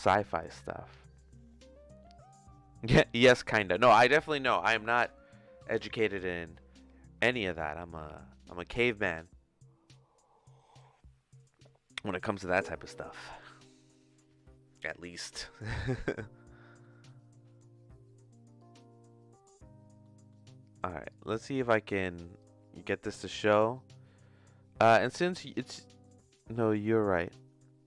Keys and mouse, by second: 16.8 middle click, 18.7 click, 20.0 middle click, 21.2 click, 22.4-23.9 drag.